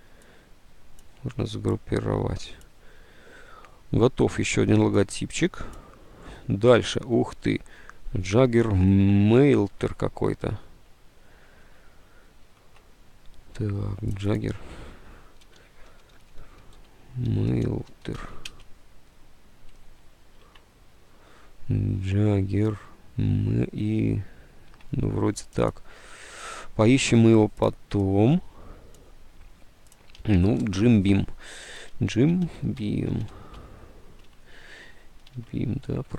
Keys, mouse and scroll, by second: 12.6 alt+Tab, 15.3-18.5 typing, 20.5 alt+Tab, 26.6 alt+Tab, 30.3 Tab, 31.7-33.7 typing, 34.0 Tab, 35.4 alt+Tab.